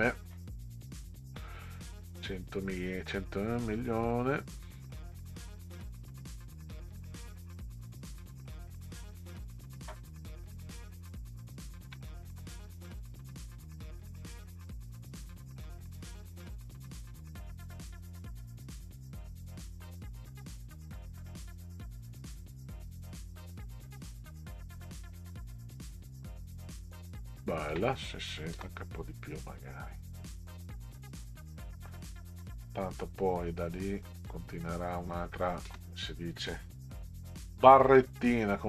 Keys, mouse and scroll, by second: 4.1 click, 6.1-8.7 drag, 9.7-10.2 ctrl+scroll up 2, 11.5-11.9 ctrl+scroll up 2, 13.9-21.7 drag, 23.0 click, 23.3 click, 24.7 click, 25.9 Down, 27.7 space, 28.6 space, 29.9 click, 31.3 Down, 34.2 click, 35.7 space, 37.0 Left.